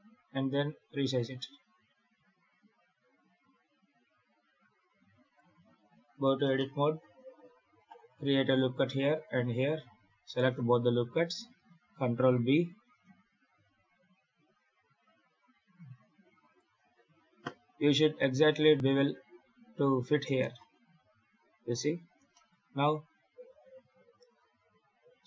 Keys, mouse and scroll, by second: 1.0 z, 2.0 s, 5.5 Tab, 6.2 scroll down 2, 6.4 shift+middle click, 7.3 ctrl+r, 8.5 ctrl+r, 10.1 alt+shift+right click, 10.8 2, 11.7 ctrl+b, 20.0 scroll up 5, 20.3 shift+middle click, 20.5 shift+scroll down 1, 21.9-22.2 scroll down 7, 22.2 shift+middle click, 22.5-23.2 scroll up 3, 23.3 alt+a, 23.6 3, 24.2 click.